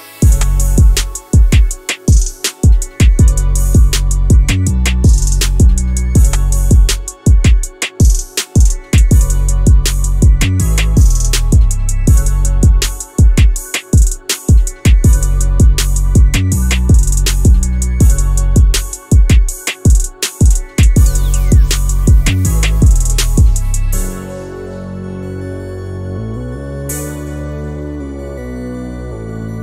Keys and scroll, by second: 1.8 Escape, 4.4 Escape, 7.4 Escape, 15.9 ctrl+shift+i, 18.1 Escape, 24.8 Escape.